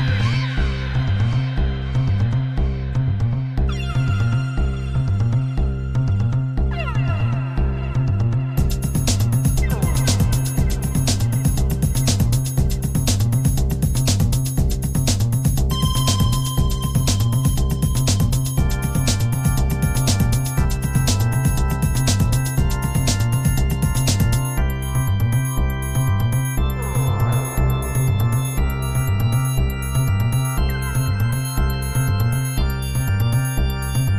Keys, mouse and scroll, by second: 2.0 click, 4.1 click, 6.3-12.8 drag, 14.6-18.3 drag, 19.1-20.4 drag, 22.3-25.2 drag, 28.0 click, 29.3 click, 33.8-34.1 drag.